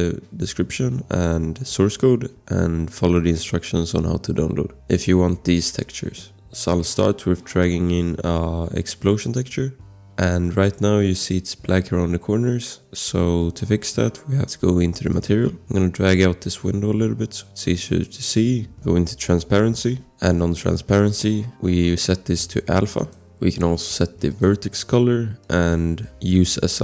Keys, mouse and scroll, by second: 6.0 click, 9.0 click, 10.4 click, 10.7 scroll, 10.7 click, 15.1 click, 18.4-19.0 scroll, 19.7 click, 24.3 click.